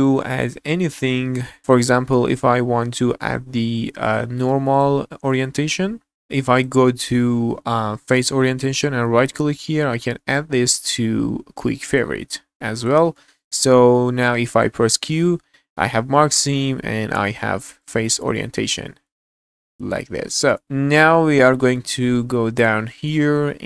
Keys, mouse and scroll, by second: 4.7 click, 12.8 click, 13.1 middle click, 14.8 q, 18.4 middle click, 18.9 scroll down 1, 19.2 q, 20.1 scroll down 2, 20.4 shift+middle click, 20.6-21.8 middle drag, 22.0-22.7 scroll up 4, 22.8 shift+middle click, 23.3 scroll up 1, 23.5 shift+middle click.